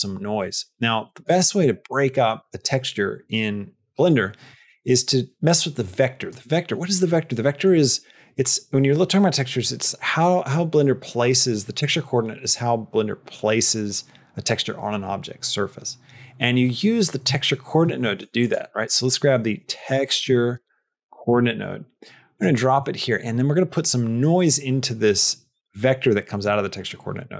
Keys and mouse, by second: 1.0 middle click, 1.2 middle click, 5.7 click, 6.4 middle click, 7.3 middle click, 16.5 middle click, 17.9 shift+a, 22.6 middle click, 26.4 click.